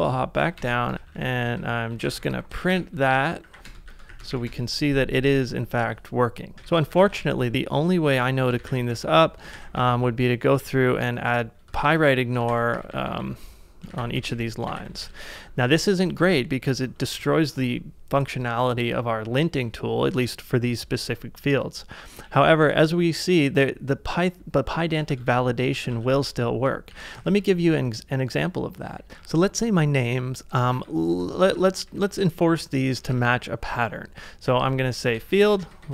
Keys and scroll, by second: 0.0-4.6 typing, 7.0 ctrl+a, 7.5 ctrl+c, 7.5-17.2 typing, 20.1-21.0 typing, 22.3-23.1 typing, 25.2 ctrl+a, 25.9 ctrl+a, 26.9 ctrl+u, 27.2 ctrl+u, 28.3-28.8 typing, 30.5-35.9 typing.